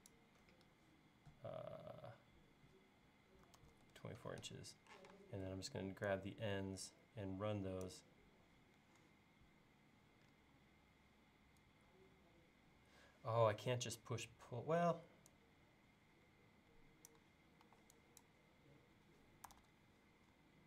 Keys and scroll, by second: 3.2-5.0 typing, 17.7 e, 19.5 super+z.